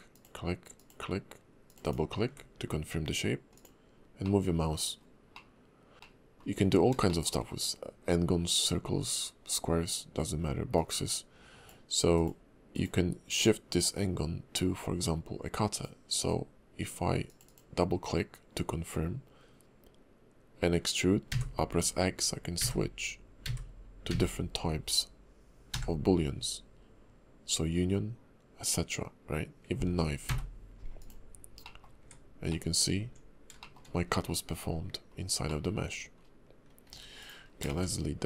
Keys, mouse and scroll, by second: 4.2 middle click, 5.3 middle click, 5.9 ctrl+z, 5.9 click, 5.9 right click, 5.9 scroll down 2, 6.0 middle click, 6.5-6.9 scroll up 1, 7.0 shift+middle click, 10.7 ctrl+click, 31.6 middle click, 32.0 Tab, 32.5 middle click, 33.0 Tab, 33.6 shift+middle click, 33.8-35.1 scroll up 3, 35.1-35.5 scroll down 2, 35.5 middle click, 35.9 Tab, 36.2-36.9 scroll down 1, 36.9-37.4 scroll down 1, 36.9 x, 37.4 scroll down 1, 37.7 shift+a.